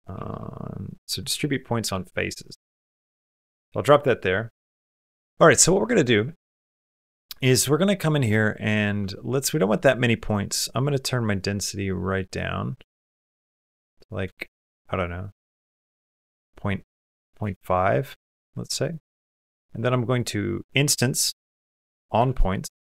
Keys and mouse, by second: 3.0 typing, 3.8 shift+click, 6.4 shift+middle click, 6.7 middle click, 7.4 shift+middle click, 10.1 click, 10.9 click, 17.2 click, 18.4 shift+click, 18.9 click, 19.3 shift+a, 20.3-21.5 drag.